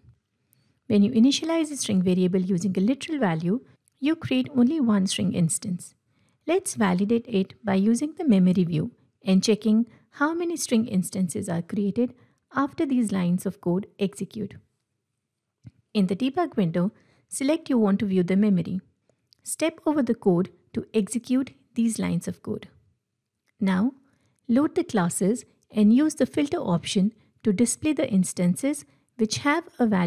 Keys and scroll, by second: 11.6 ctrl+F8, 19.6 F8, 29.0 Return.